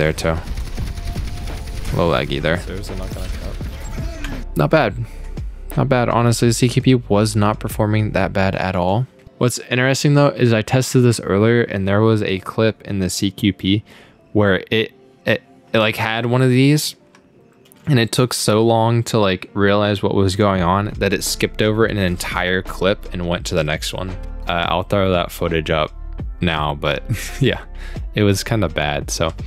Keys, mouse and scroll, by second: 4.1 space, 5.8-6.4 scroll down 4, 16.8-17.2 scroll up 1, 18.0 click, 20.4-24.3 drag.